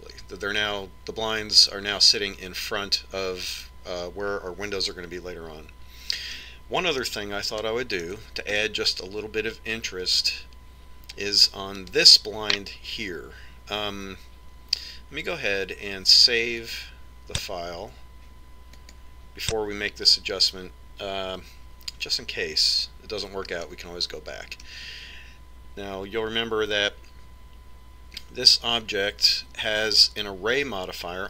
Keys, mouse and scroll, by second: 7.6-11.0 middle drag, 12.5-14.2 right drag, 17.3 click, 24.4-26.1 middle drag.